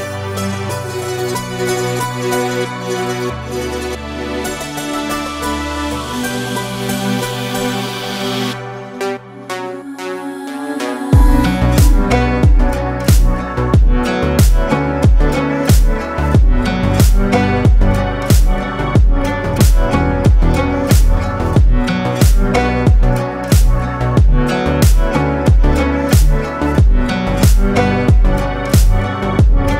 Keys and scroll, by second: 1.9 ctrl+space, 2.5 ctrl+space, 9.8 ctrl+space, 14.9 ctrl+space, 15.3 ctrl+z, 16.5 space, 20.6 ctrl+alt+z, 21.4 ctrl+alt+z.